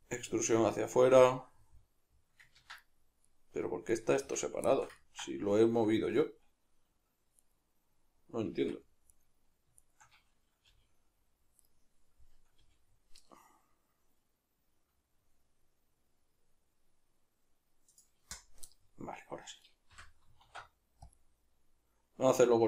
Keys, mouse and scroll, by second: 0.1 click, 0.1-7.4 middle drag, 2.6 ctrl+z, 4.1 Tab, 7.4 right click, 8.5 Tab, 9.1 right click, 9.8 shift+right click, 10.7 g, 11.7 right click, 12.6 g, 18.0 click, 19.6 right click, 19.9 l, 20.4 alt+e.